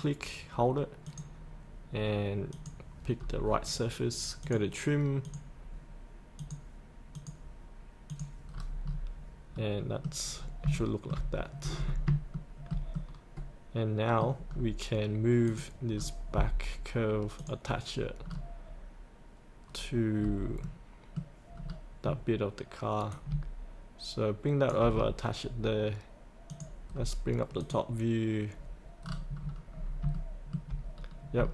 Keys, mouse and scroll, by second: 3.2 scroll up 1, 4.4-6.3 drag, 8.5 scroll up 1, 9.5 middle click, 10.3-10.7 scroll up 1, 10.8 shift+middle click, 11.3-11.7 scroll down 1, 11.7-12.1 scroll up 1, 12.3-14.4 shift+middle drag, 14.5 scroll down 1, 15.5 click, 15.9-17.4 scroll down 1, 17.4 click, 18.2-19.4 scroll down 1, 19.5 scroll down 1, 19.7-20.2 scroll up 1, 20.6 middle click, 21.2-21.5 scroll up 1, 21.5-22.3 scroll down 1, 23.1-24.7 drag, 24.9 scroll up 1, 26.5 click, 26.9-27.6 scroll down 1, 27.6-28.9 drag, 29.0-29.9 scroll down 1, 30.2 shift+middle click, 31.0 scroll down 1, 31.4 shift+middle click.